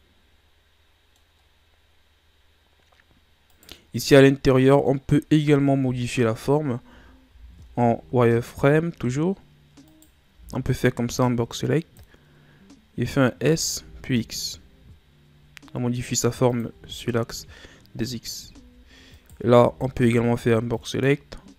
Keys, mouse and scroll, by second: 2.8-3.5 scroll up 2, 3.5 right click, 4.1-4.6 ctrl+scroll up 1, 4.6 middle click, 4.9-5.8 scroll up 1, 5.8 KP_7, 6.7 Tab, 7.3 z, 7.7-8.7 ctrl+scroll up 4, 9.8 right click, 10.3 b, 13.4 s, 16.7 z, 18.1-18.5 scroll up 1, 18.5 z, 19.1 right click, 19.5 b, 20.7 click.